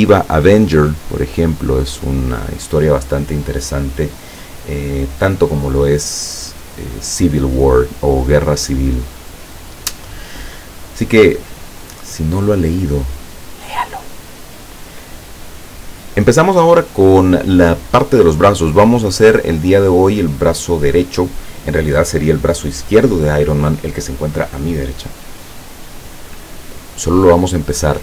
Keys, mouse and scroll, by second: 4.7-5.1 scroll up 2, 10.8 click, 26.9-28.0 drag.